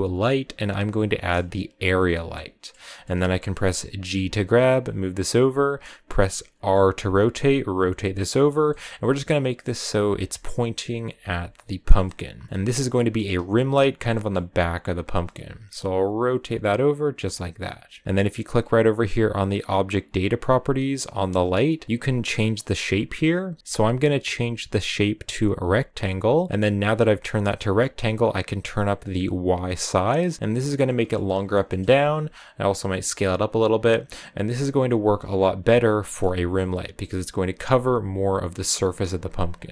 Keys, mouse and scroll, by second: 2.2-4.1 middle drag, 4.1 g, 6.3 r, 7.3 right click, 8.6-10.2 middle drag, 10.2 r, 11.0 g, 12.0 middle click, 12.5 g, 12.8 middle click, 13.4 r, 14.0 middle click, 14.3 g, 15.0 r, 26.6-30.2 drag, 30.2-31.9 middle drag, 31.9 s, 32.7 r, 34.7-35.9 drag, 35.9 middle click, 36.2 g, 37.6 r, 38.0 g, 39.1 r, 39.4 g.